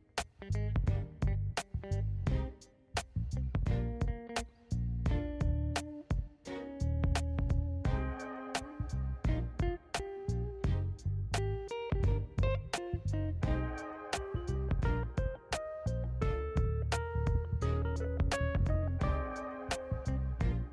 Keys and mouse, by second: 0.9 click, 1.7 click, 4.1 click, 7.2 click, 8.9 shift+a, 12.8 click, 13.8 click, 16.0 middle click, 16.9 middle click, 17.7 middle click, 20.1 click.